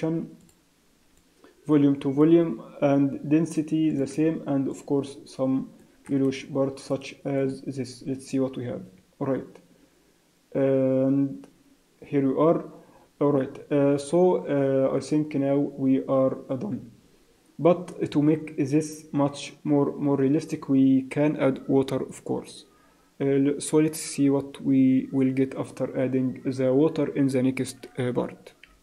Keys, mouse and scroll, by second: 1.2 click, 3.9 click, 6.7 click.